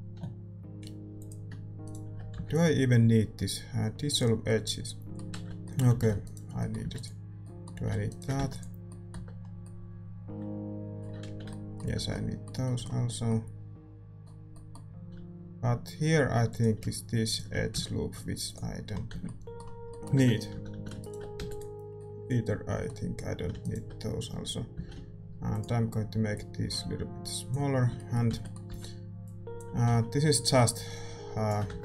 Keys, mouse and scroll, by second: 0.0 a, 1.1-4.1 drag, 1.8-4.1 right drag, 4.1 x, 5.3 ctrl+z, 5.9 a, 6.2 right click, 7.0 x, 8.5 x, 9.1 Tab, 11.2 ctrl+z, 11.2-12.6 middle drag, 11.9 Tab, 14.9 a, 16.5-18.5 drag, 18.5 right click, 18.5 x, 19.1 Tab, 20.5 a, 20.7 a, 21.0-26.3 right drag, 21.5 x, 24.7 s, 26.3-28.2 drag, 27.8 a, 27.9-30.5 middle drag, 28.2 z, 29.5 b, 29.8 z, 30.5-31.8 drag, 31.7 Tab, 31.7-31.8 middle drag.